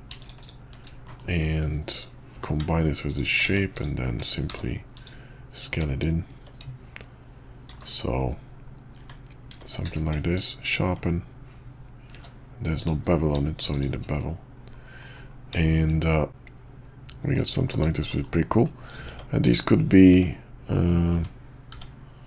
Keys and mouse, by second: 1.0 middle click, 1.9 click, 2.3 q, 3.4 Tab, 3.7 click, 4.5 s, 6.3 Tab, 7.7 shift+2, 9.0 Tab, 9.5 Tab, 9.8 q, 12.1 q, 15.0 middle drag, 15.6 shift+middle click, 16.3-17.3 middle drag, 17.6 shift+middle click, 18.1 middle click, 18.8 click, 19.1 Tab, 19.4 click, 20.1 Tab, 20.7 drag, 21.1 `, 21.7 `.